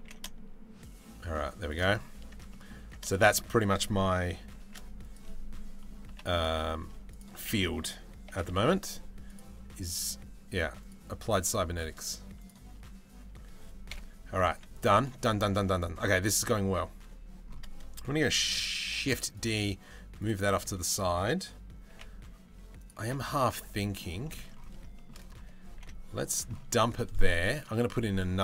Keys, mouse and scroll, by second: 1.8 Tab, 2.1 middle click, 2.4 Tab, 2.7 shift+middle click, 4.2 shift+d, 5.6 p, 6.5 Tab, 6.7 click, 7.1 middle click, 7.9 g, 10.4 click, 11.6 click, 12.0 click, 13.5 KP_7, 14.1 z, 14.7 shift+middle click, 18.6 shift+d, 19.7 click, 21.5 g, 22.6 z, 23.1 middle click, 23.8 shift+middle click, 24.5 shift+middle click, 25.3 g, 26.3 middle click, 27.1-28.1 drag.